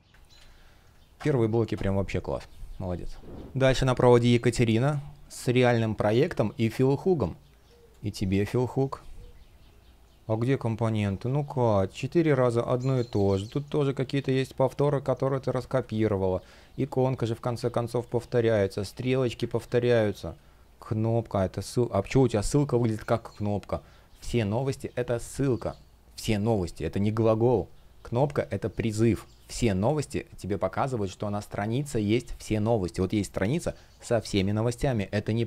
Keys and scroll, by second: 0.0 super+z, 6.2 space, 7.7 shift+o, 7.9 space, 10.8 shift+p, 12.3 super+z, 14.0 super+z, 15.2 super+z, 15.5 space, 17.3 super+z, 17.6 space, 19.2 super+z, 19.6 space, 22.1 shift+o, 35.3 super+z.